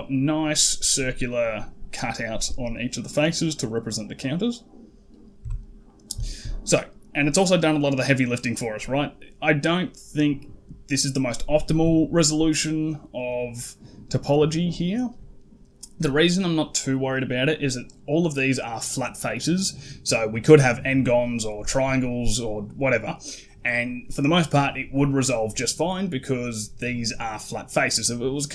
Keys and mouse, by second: 0.8 middle drag, 2.0 middle drag, 3.5 middle drag, 4.0 middle drag, 5.2 Tab, 5.7 middle click, 6.1 shift+middle click, 8.2 middle click.